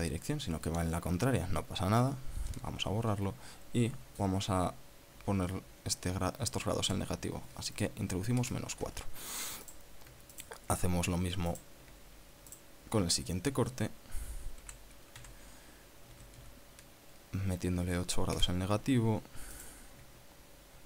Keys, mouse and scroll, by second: 3.1 BackSpace, 7.5 KP_Subtract, 7.7 KP_4, 9.1 KP_Enter, 10.4 right click, 11.1 shift+right click, 12.3 right click, 13.3 alt+shift+right click, 15.4 r, 15.9 z, 16.8 KP_Subtract, 17.1 KP_8, 19.1 KP_Enter, 20.3 right click.